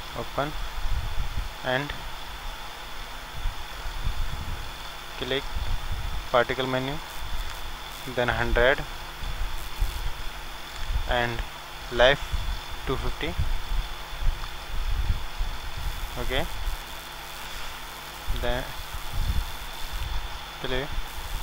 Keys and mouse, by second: 0.0-1.3 drag, 0.6 middle click, 2.7-8.2 drag, 2.7-8.2 middle drag, 9.6-21.4 drag, 9.6 KP_0.